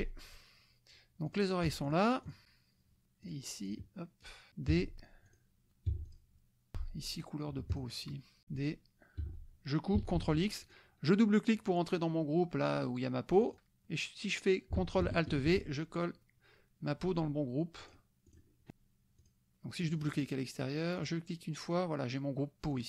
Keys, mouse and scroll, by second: 1.4 click, 1.9 shift+click, 2.2 shift+click, 3.2 shift+click, 3.8 shift+click, 4.2 shift+click, 4.7 d, 5.3 click, 6.0 F1, 6.1 click, 6.7 shift+F2, 7.1 shift+click, 7.7 shift+click, 8.4 d, 8.6 click, 9.2 F1, 10.1 ctrl+x, 10.6 ctrl+click, 13.4 click, 15.3 ctrl+alt+v, 17.8 click, 19.2 click, 19.9 click, 21.0 click, 22.7 click.